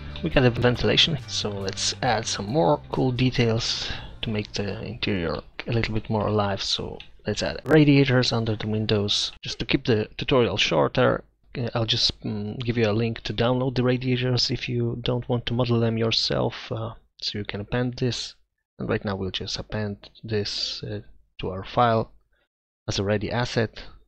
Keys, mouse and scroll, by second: 1.3-2.6 middle drag, 2.8-4.3 middle drag, 4.9-5.4 middle drag, 5.6-6.6 middle drag, 6.8-7.3 middle drag, 8.9-10.0 middle drag, 11.6 middle drag.